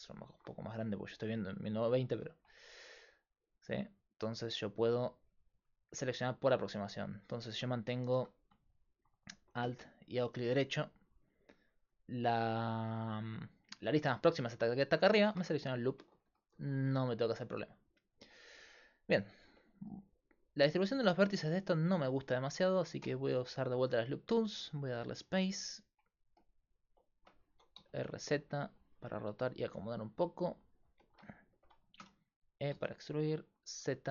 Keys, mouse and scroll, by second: 8.2-12.3 right drag, 8.2 a, 23.0 w, 25.3 click, 27.5 r, 32.0 e.